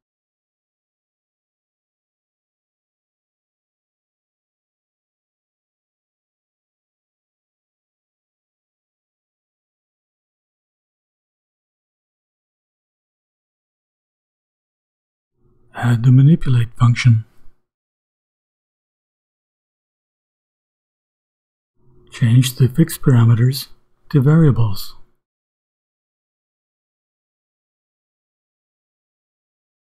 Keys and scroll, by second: 0.0-0.7 typing, 1.9 shift+', 8.6-10.7 typing, 11.0 shift+Return, 15.6-18.6 typing, 20.0 ., 20.8 Return, 21.8 shift+[, 23.6 ], 26.1-29.8 typing.